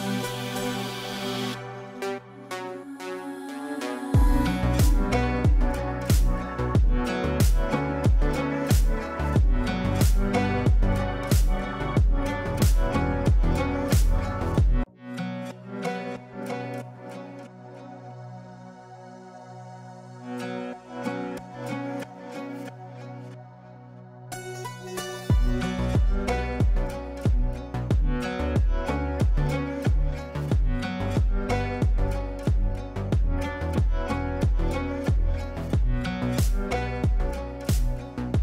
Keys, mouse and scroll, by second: 6.0-7.3 shift+drag, 8.3-11.3 ctrl+drag, 11.0 ctrl+right click, 11.0 ctrl+right click, 12.2 click, 13.1 ctrl+a, 14.5-19.5 typing, 21.2 space, 23.2 ctrl+space, 24.7-29.6 drag, 29.7 space, 31.0 shift+click, 32.2 l, 32.6-37.1 drag, 37.1 space, 38.1 shift+click.